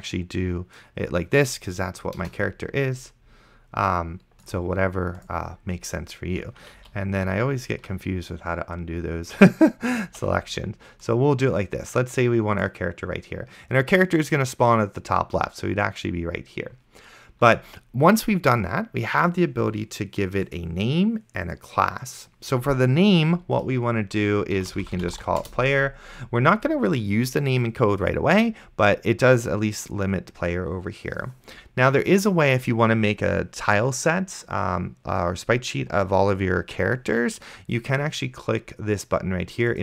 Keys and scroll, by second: 2.5 BackSpace, 7.0 ctrl+z, 10.3 ctrl+z, 24.5-25.9 typing.